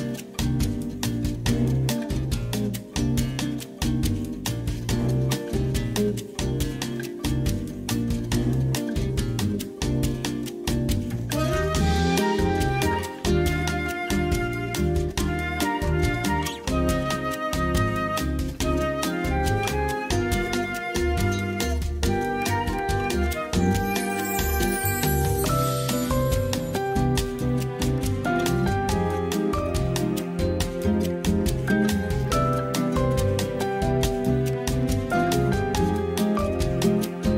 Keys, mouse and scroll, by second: 4.3-6.3 ctrl+z, 6.4 ctrl+shift+z, 7.8 click, 8.3 click, 8.5 click, 9.0 click, 9.4 click, 10.3 click, 12.2 middle click, 13.2 KP_1, 14.3 shift+middle click, 15.2 shift+middle click, 17.9 click, 18.8 click, 19.2 click, 19.8 click, 21.8 shift+a, 22.7 Tab, 24.3 ctrl+a, 26.0 Tab, 26.5 Tab, 27.0 shift+middle click, 28.0 click, 28.3 shift+middle click, 29.1 click, 31.2-32.3 drag, 34.3 p, 36.7 Tab, 36.9 click.